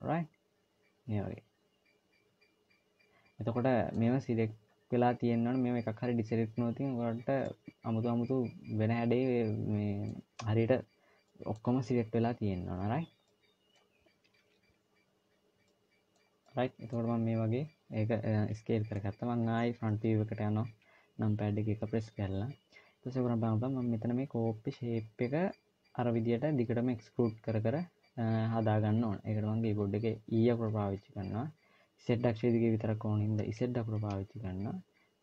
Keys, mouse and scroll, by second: 7.2 scroll up 1, 7.3 middle click, 11.1 middle click, 13.0 middle click, 16.3 middle click, 18.4 middle click, 20.5 KP_1, 28.6-29.3 scroll down 1, 30.2 e.